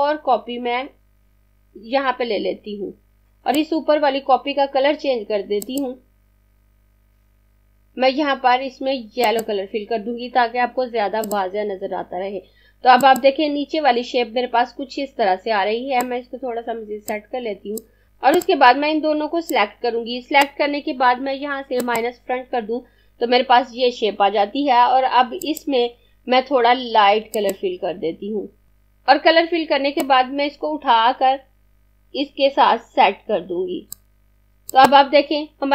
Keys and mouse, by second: 4.9 click, 8.5 click, 14.7 click, 18.4 click, 25.2 click.